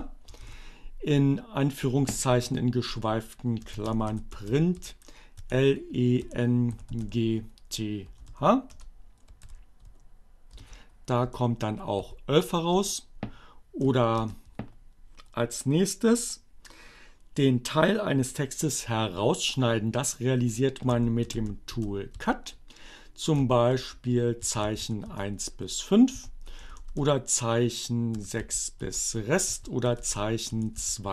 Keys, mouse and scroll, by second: 0.0 shift+space, 2.5 alt+7, 2.6-6.5 typing, 7.9 BackSpace, 9.1 alt+0, 10.7 Return, 11.6 Up, 12.8 BackSpace, 20.4-21.5 typing, 23.0-24.8 typing, 25.1 Return, 25.5 Up, 26.4 BackSpace, 28.0-31.1 typing, 29.1 Up.